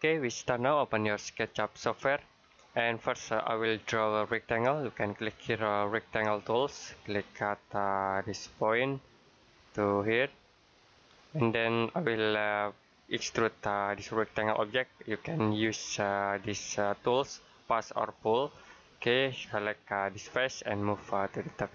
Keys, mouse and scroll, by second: 6.3 click, 7.6 middle click, 8.7 click, 18.2 click.